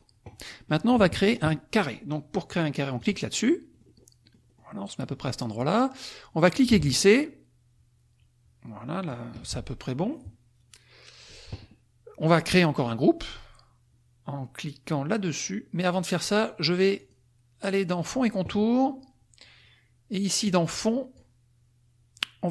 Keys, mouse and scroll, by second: 0.5 click, 3.0 click, 3.7-4.7 drag, 5.0 click, 6.6-9.3 ctrl+drag, 17.0 click, 20.5-21.5 drag.